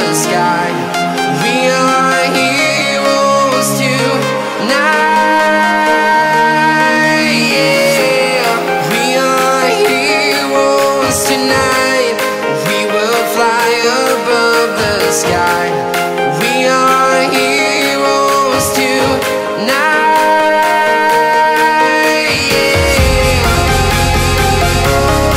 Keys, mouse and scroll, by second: 1.5 shift+click, 2.3 scroll down 1, 2.9-3.9 right drag, 3.9 scroll down 1, 4.7 right click, 5.5 shift+click, 6.1-6.5 scroll down 1, 6.5 right click, 6.9-7.4 scroll up 1, 7.7 shift+click, 10.0 click, 10.4 right click, 12.2 click, 12.7 scroll down 1, 13.8 right click, 14.5-15.4 scroll up 1, 15.5 ctrl+alt+r, 16.1 scroll up 1, 18.9-19.3 scroll, 19.8 right click, 20.3 scroll up 1, 21.3 ctrl+shift+click, 22.3 right click, 23.3 ctrl+shift+click, 23.7 scroll down 1, 24.2 right click, 25.1 click.